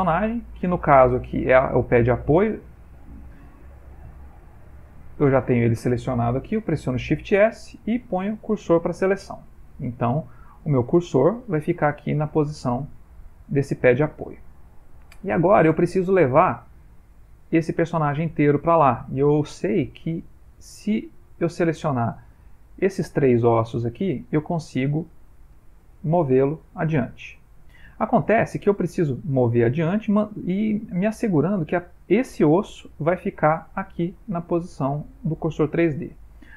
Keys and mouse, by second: 0.1 click, 2.9 click, 5.2 click, 7.0 shift+s, 9.3 middle click, 10.0 ctrl+middle click, 10.7 middle click, 12.1 shift+middle click, 13.4 click, 14.7 middle click, 15.7 middle click, 20.5 click, 22.2 click, 23.0 shift+click, 23.1 shift+click, 25.7 g.